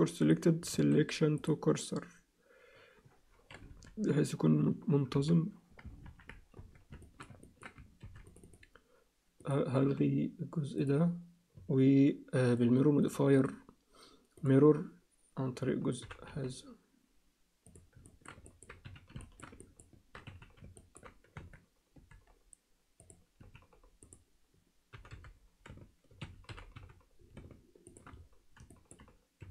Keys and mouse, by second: 0.7 shift+s, 3.7 KP_3, 5.1 KP_3, 6.0 ctrl+KP_1, 6.6 Tab, 7.0 alt+shift+middle click, 7.4 ctrl+alt+middle click, 8.0 ctrl+r, 9.8 x, 11.5 Tab, 13.4-14.5 drag, 16.0 g, 18.1 alt+shift+middle click, 18.5 ctrl+alt+middle click, 18.8 z, 19.2 alt+shift+middle click, 19.6 ctrl+alt+middle click, 20.3 z, 20.8 ctrl+click, 21.3 Tab, 21.9 a, 23.0 click, 23.5 z, 24.9 g, 26.5 g, 28.7 alt+shift+middle click, 29.4 a.